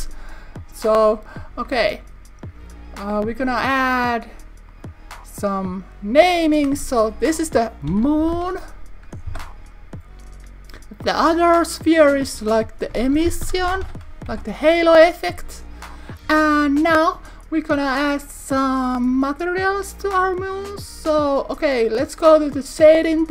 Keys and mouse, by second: 0.6 click, 4.7 click, 6.3-9.9 drag, 11.7 click, 11.9-15.3 drag, 17.1 click.